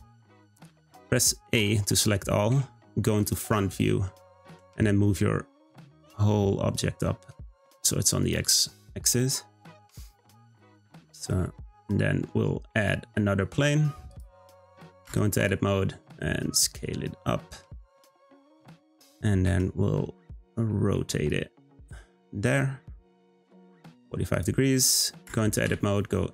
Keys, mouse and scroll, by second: 1.6 a, 2.5 `, 3.8-4.4 scroll up 3, 4.4 g, 9.2-9.6 scroll down 1, 9.6-10.0 middle drag, 10.0 scroll up 1, 10.2 scroll down 1, 10.5 click, 10.8-11.3 scroll down 2, 11.3-12.7 middle drag, 12.7 shift+a, 15.0 Tab, 15.4 s, 19.5 Tab, 20.6 r, 25.2 Tab, 25.6 2.